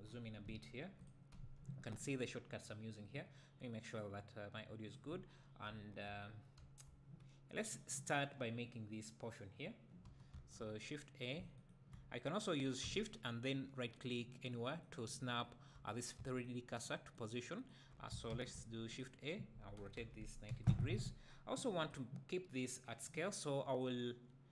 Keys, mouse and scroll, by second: 0.1-0.5 scroll up 2, 0.5 `, 1.0 click, 1.4 `, 5.5 scroll down 2, 5.7 `, 6.2-6.6 scroll up 2, 6.6 `, 10.3 shift+a, 11.6-14.2 shift+right drag, 14.4-16.8 shift+right drag, 17.1 shift+right click, 17.6 shift+right click, 18.3 shift+a, 19.8 r, 21.9 click.